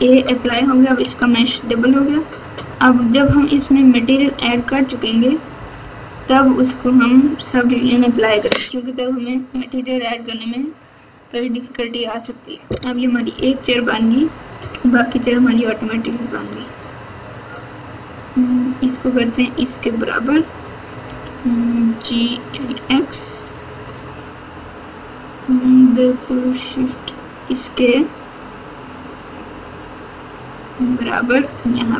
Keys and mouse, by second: 1.0 Tab, 2.5 Tab, 3.5-6.5 typing, 14.5 KP_1, 16.3 click, 16.5 click, 18.7 click, 21.0 g.